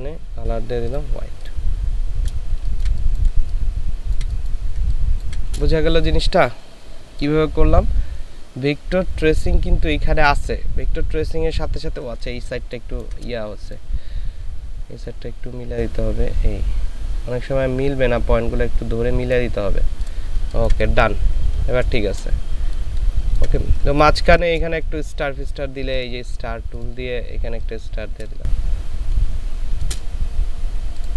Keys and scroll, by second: 2.7 ctrl+space, 4.8 ctrl+space, 12.7 ctrl+space, 20.5 ctrl+space, 23.8 ctrl+space, 28.3 space.